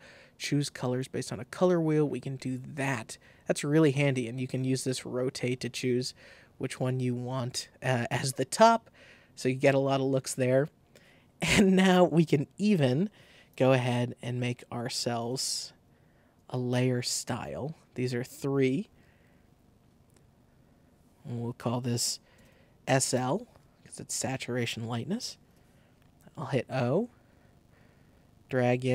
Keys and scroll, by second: 22.0-22.9 typing, 23.0 shift+Return, 24.0 Return, 25.4 o.